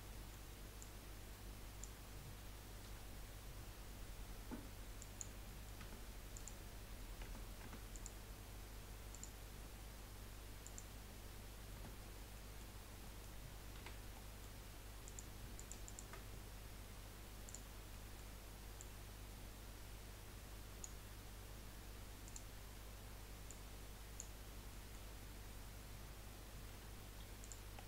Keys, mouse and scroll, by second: 0.1 middle click, 0.8 click, 2.8 Delete, 5.4 middle click, 5.8 Tab, 6.3 click, 7.2 Tab, 7.6 Tab, 7.9 click, 9.1-11.7 drag, 11.7 Tab, 12.0 scroll up 1, 12.3 middle click, 12.8-13.2 scroll up 2, 13.2 middle click, 13.7 2, 14.0 scroll up 1, 14.2 middle click, 15.0 click, 15.5 alt+shift+click, 15.8 alt+shift+click, 17.4 click, 17.9 middle click, 18.8 click, 22.2-23.5 drag, 24.6 scroll down 4, 24.8 middle click, 25.1 scroll up 1, 26.7 3, 27.4 click, 27.7-27.8 scroll down 3.